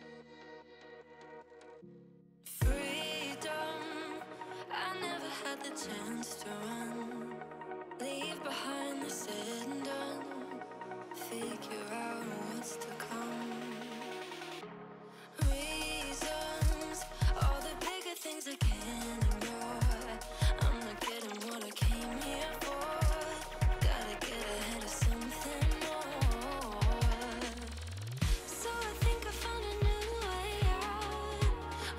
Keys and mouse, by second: 3.5 click, 9.4 click, 12.0 click, 12.5 click, 15.5 click, 15.6 alt+shift+click, 16.2 Return, 18.9 click, 19.7 Down, 21.5 Down, 23.2 right click, 24.3 click, 24.7 ctrl+j, 25.2 click, 26.9 right click, 28.3 click, 29.0 Down, 30.1 Down.